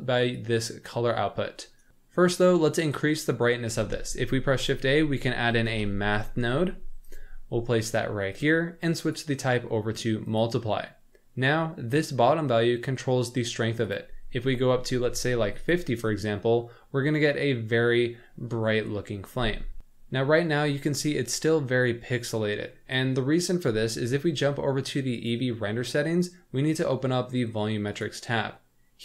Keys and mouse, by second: 3.8 shift+a, 9.1-10.4 drag, 13.9-15.6 drag, 16.6-17.8 middle drag, 21.1-22.8 middle drag, 25.2 click, 27.9 click.